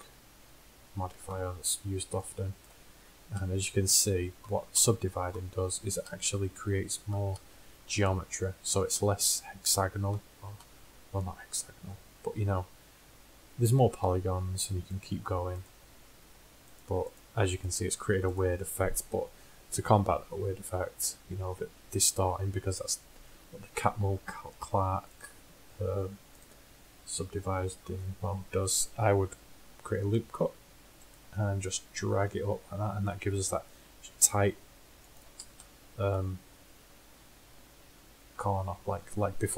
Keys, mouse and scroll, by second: 12.9 middle click, 15.0-19.4 drag, 19.4 KP_1, 20.0-22.1 drag, 25.3-28.3 drag, 28.3 middle click, 30.5 ctrl+r, 35.9-38.1 middle drag.